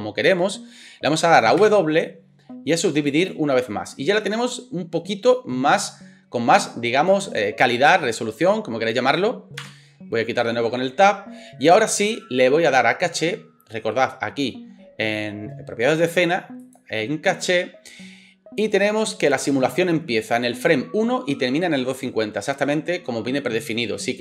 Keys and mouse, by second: 1.6 w, 9.6 Tab.